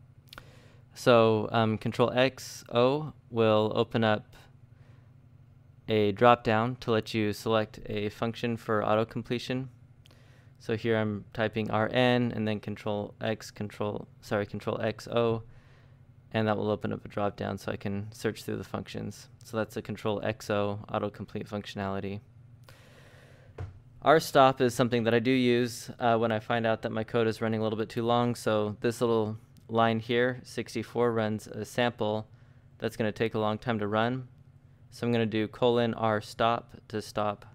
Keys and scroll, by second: 0.0 ctrl+x, 1.6 ctrl+n, 1.9 ctrl+n, 2.4 ctrl+n, 3.2 ctrl+n, 5.4 ctrl+n, 7.9-11.2 typing, 12.7 ctrl+x, 12.9 ctrl+o, 13.9 ctrl+n, 14.4 ctrl+n, 15.4 shift+(, 16.6-19.0 typing, 22.2-23.9 typing, 28.5 Escape, 31.7-32.7 typing, 33.0 ctrl+j, 34.1-36.6 typing.